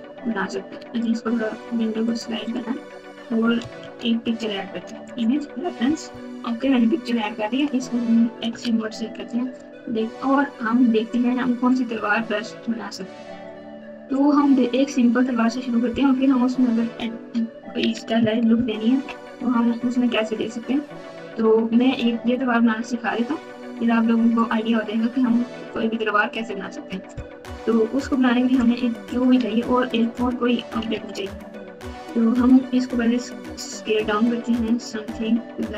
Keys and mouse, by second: 0.0-1.0 drag, 2.0 click, 4.1 shift+a, 6.1 KP_Multiply, 7.5 click, 8.6 alt+z, 18.5 ctrl+KP_8, 18.9 ctrl+KP_8, 19.1 ctrl+KP_8, 29.0 click, 30.9 alt+z, 33.0 s.